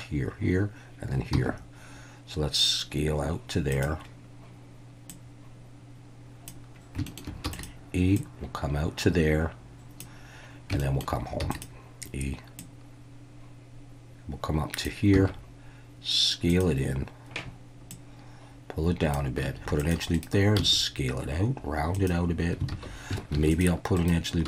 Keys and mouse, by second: 1.3 s, 3.7 click, 5.1-6.5 drag, 7.1 shift+middle click, 7.5 e, 7.5 click, 8.2-10.0 drag, 10.8 shift+middle click, 11.4 e, 11.5-14.8 drag, 15.1 s, 16.5 click, 18.0-19.1 drag, 19.4 s, 19.6 ctrl+r, 20.1 right click, 20.6 s, 21.9 click, 22.7 alt+a, 23.3 ctrl+r, 24.0 right click.